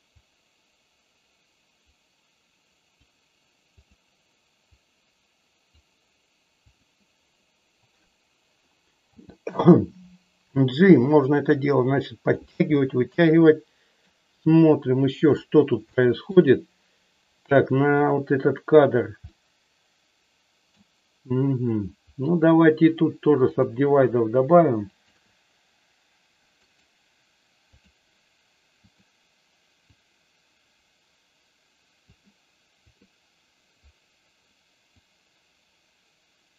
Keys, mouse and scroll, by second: 0.3-2.9 drag, 3.8 click, 4.5-5.7 drag, 6.7 click, 9.1 g, 12.3 click, 12.7-13.9 middle drag, 15.9 shift+middle click, 19.3-20.8 middle drag, 23.4 click, 24.8 shift+click, 26.7-28.0 right drag, 28.8 click, 29.9-31.9 drag, 35.1-36.5 drag.